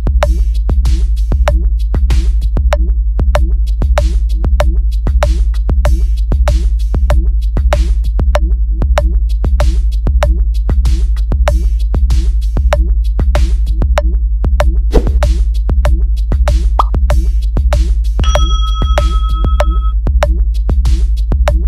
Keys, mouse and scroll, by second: 0.2-1.3 drag, 1.7 click, 3.0 click, 3.8 click, 4.3-4.8 drag, 5.2-5.8 drag, 6.1-7.3 drag, 7.7 click, 8.9 click, 9.9 click, 10.9 click, 11.7 click, 13.1 click, 15.3 click, 15.9 click, 16.7 click, 18.7 click, 19.1 click, 20.1 click, 21.1 click.